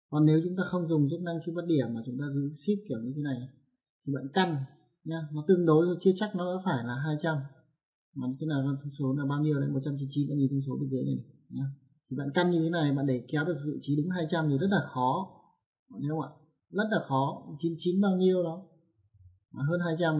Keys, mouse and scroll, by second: 1.0 click, 3.6 click.